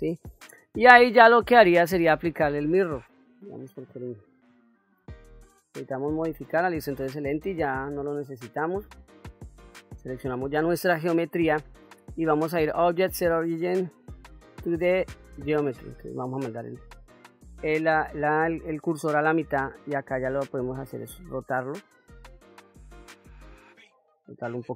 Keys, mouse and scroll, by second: 1.6 click, 5.1 ctrl+a, 7.0 click, 8.4 Delete, 9.4 click, 12.3-16.0 drag, 23.5 click.